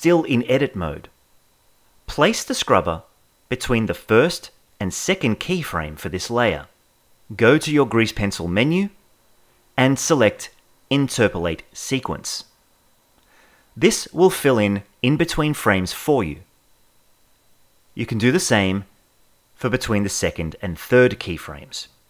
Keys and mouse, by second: 2.2-3.5 drag, 8.2-13.6 drag, 17.1-18.1 drag, 19.5-20.9 drag.